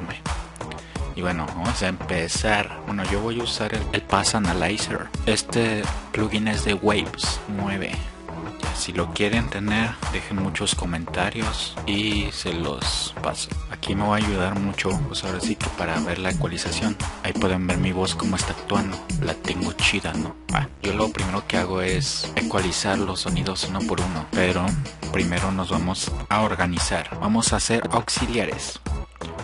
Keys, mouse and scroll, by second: 2.5 click, 2.7 click, 4.2 click, 20.7 F1, 20.7-21.1 drag, 21.7 F1, 21.7 drag, 22.2 click, 24.3-27.9 drag.